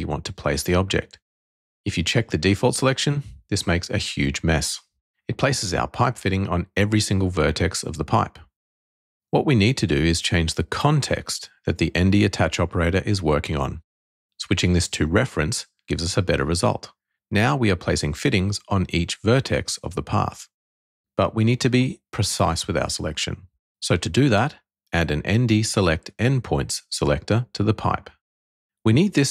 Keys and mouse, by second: 2.6 click, 3.7 shift+middle click, 5.3 shift+middle click, 6.4-9.6 middle drag, 11.0 click, 12.9-15.8 drag, 16.9 middle click, 17.8 click, 18.6-20.3 middle drag, 18.7 click, 25.0 click.